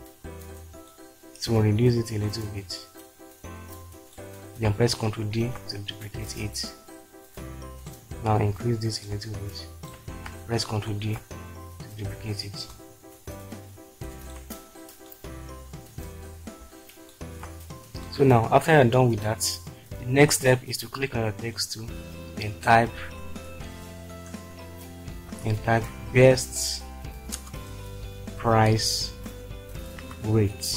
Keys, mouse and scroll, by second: 5.3 ctrl+d, 7.1 click, 9.1 shift+click, 11.0 ctrl+d, 23.8 shift+b, 25.3-26.5 typing, 27.3 Return, 28.3-30.7 typing.